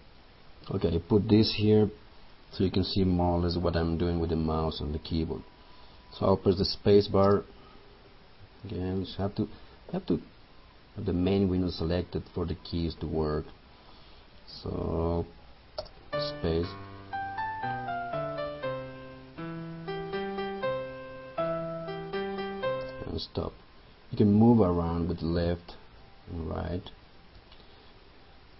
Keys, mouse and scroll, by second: 8.7 click, 15.8 space, 24.9 Left, 26.1 Right, 27.4 Left.